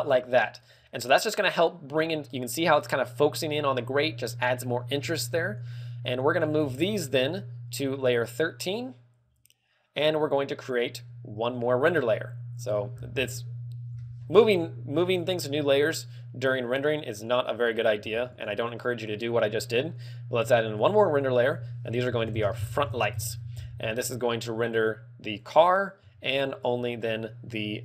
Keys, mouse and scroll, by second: 0.0 click, 0.9 r, 0.9 g, 5.9 shift+right click, 6.5 shift+right click, 17.5 click, 18.3 ctrl+w, 21.0 click, 21.2 click, 21.7 click, 23.4 click, 25.8 click, 26.9 shift+click.